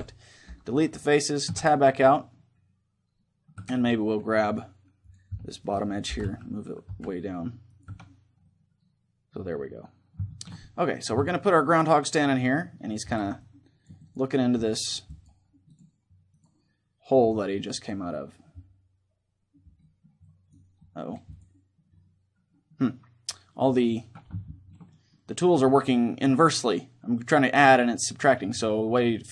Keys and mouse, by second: 1.2 Tab, 1.7-4.2 middle drag, 3.3 Tab, 4.8 click, 5.4-6.4 middle drag, 5.8 g, 6.4 click, 6.6 right click, 7.5-9.2 drag, 7.6 Tab, 8.2-14.0 middle drag, 13.1-15.4 drag, 14.3-15.4 middle drag, 16.1-19.2 drag, 19.5 middle click, 20.0-23.2 drag, 23.2 middle click, 24.2-29.3 middle drag.